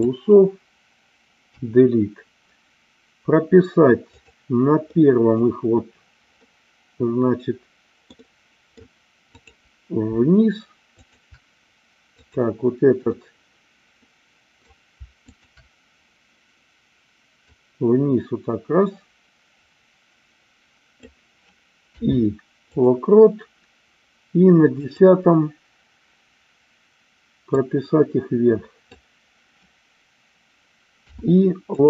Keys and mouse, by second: 1.4 Delete, 4.2 click, 5.1 middle click, 6.4-8.8 middle drag, 11.1 shift+click, 12.2-13.3 drag, 13.4-14.7 middle drag, 15.3 shift+click, 17.6-21.0 drag, 24.7 click, 27.5-28.9 drag.